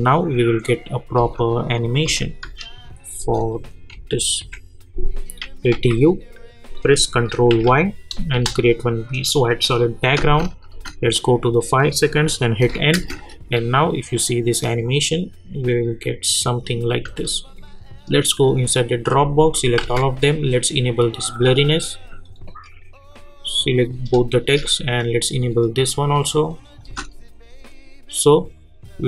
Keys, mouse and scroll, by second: 1.7 click, 2.1 space, 3.5 click, 3.9-4.6 typing, 5.7 u, 8.4 Return, 11.3 click, 17.2 space, 24.4 shift+click.